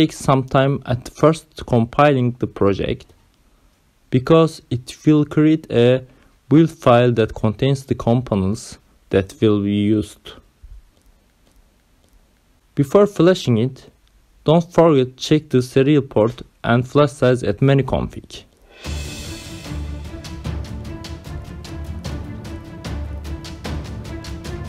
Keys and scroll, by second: 0.0-2.2 typing, 11.3 Down, 12.4 Return, 13.1 Down, 15.5 Right, 16.0 Return, 16.4 Right, 16.7 Return, 17.7-19.5 typing.